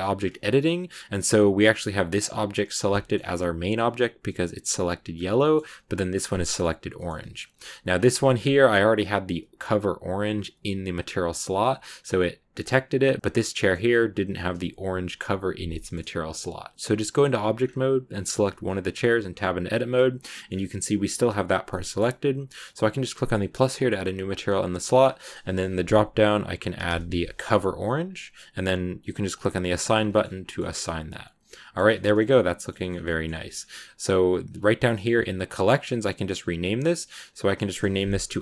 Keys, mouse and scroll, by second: 0.1 Tab, 2.8 shift+middle click, 3.0-3.7 scroll up 4, 5.0 scroll down 1, 5.3 shift+middle click, 6.1 right click, 6.1 scroll down 2, 6.4-7.4 shift+middle drag, 7.4 Tab, 7.4-11.0 scroll down 2, 8.0 a, 11.0-11.8 scroll down 1, 11.8 scroll up 2, 12.8 Tab, 13.2 scroll down 2, 13.4-16.7 middle drag, 16.7-17.5 scroll down 2, 17.5 scroll up 2, 18.4-18.8 scroll down 1, 18.8 Tab, 20.1-23.4 middle drag, 23.4-28.0 drag, 29.4 click, 29.6 Tab, 29.8-30.6 scroll down 5, 30.0 middle click, 30.2 a, 30.3 middle click, 30.6-32.8 middle drag, 32.8 scroll up 3, 32.9-34.4 middle drag, 34.4-35.7 drag, 35.7 right click, 37.2 click, 37.3-38.4 drag.